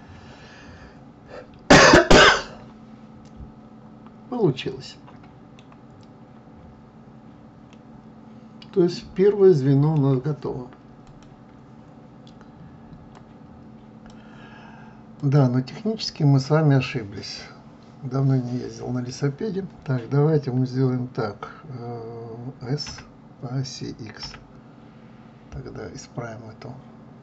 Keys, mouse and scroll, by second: 6.1-7.4 scroll up 1, 7.4-14.7 middle drag, 14.7 click, 15.7-18.7 middle drag, 22.4 s.